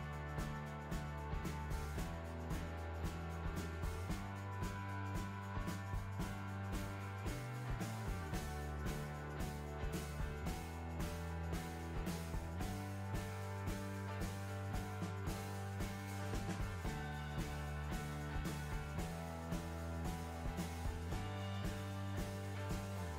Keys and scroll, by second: 22.6 Delete.